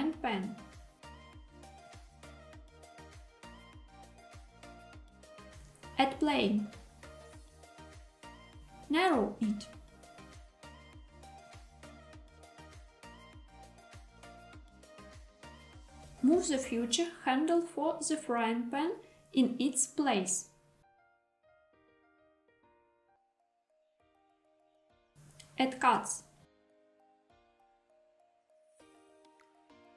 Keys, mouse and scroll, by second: 5.1 click, 6.1 shift+a, 8.8 s, 9.8 y, 15.0 click, 16.2 g, 17.0 x, 20.9 click, 21.8 KP_7, 23.5 Tab, 26.1 ctrl+r, 27.7-28.7 scroll up 1, 28.7-29.2 scroll up 1.